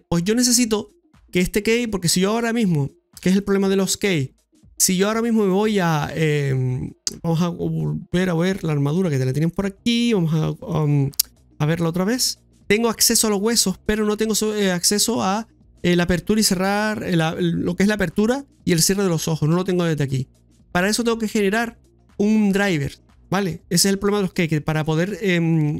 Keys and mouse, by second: 5.3-6.7 drag, 10.6 click, 12.0 click, 12.5 middle click, 13.3 right click, 13.9 right click, 14.3 shift+middle click, 14.8 middle click, 20.7-22.6 middle drag, 24.2 shift+middle click.